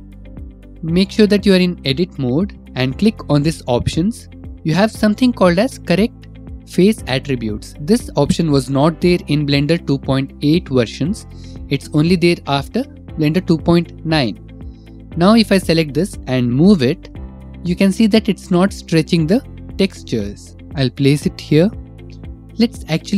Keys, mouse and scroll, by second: 3.4-5.0 drag, 7.0 click, 14.8 click, 15.6 click, 16.7 g, 21.4 ctrl+alt+z, 21.6 click.